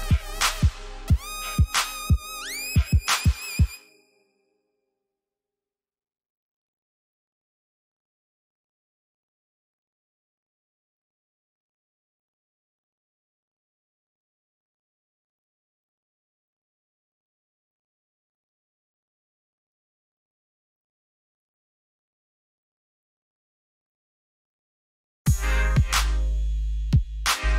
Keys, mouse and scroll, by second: 2.7 c, 6.5 click, 9.0 Escape, 10.8 click, 17.1 KP_Enter, 18.5 c, 20.2 click, 26.2 KP_Enter.